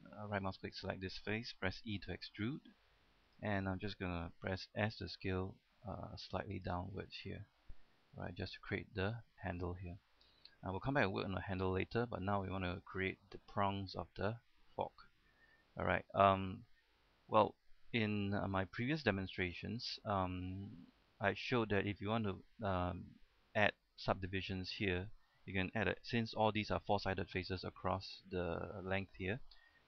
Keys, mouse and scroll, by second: 0.1 ctrl+Tab, 0.1 click, 0.8 right click, 2.4 e, 3.5 click, 5.1 s, 6.8 click, 7.1 scroll down 1, 7.3 middle click, 8.2 shift+middle click, 8.6-9.7 scroll up 1, 9.9 shift+middle click, 10.5 shift+middle click, 12.0 middle click, 12.4-13.0 shift+scroll up 1, 13.2 scroll up 1, 13.6 shift+middle click, 14.8 middle click, 15.7 scroll up 1, 15.8 scroll down 1, 16.2 shift+middle click, 16.9-18.8 middle drag, 18.9 shift+middle click, 21.0-21.4 scroll up 1, 21.5 shift+middle click.